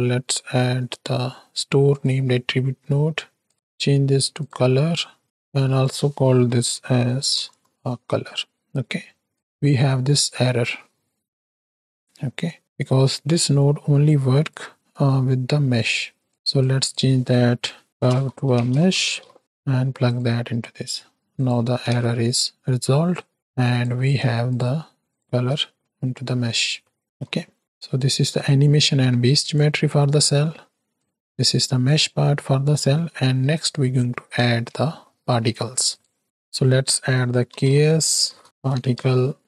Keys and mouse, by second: 3.7 click, 4.9 click, 5.6-7.7 drag, 7.5 BackSpace, 9.3 drag, 12.8-13.3 right drag, 14.0-14.5 right drag, 14.8 right click, 16.2 shift+right click, 16.6-20.2 drag, 21.3 click, 21.8 ctrl+x, 22.2 click, 23.5 click, 24.5-25.4 ctrl+shift+drag, 25.9 click, 26.8 middle click, 27.1 x, 27.4 click, 28.3-29.5 drag, 30.1 click, 30.9-31.8 drag, 32.4-33.1 middle drag, 33.5 middle drag, 34.4 ctrl+space, 35.1 middle click, 36.2-39.4 drag.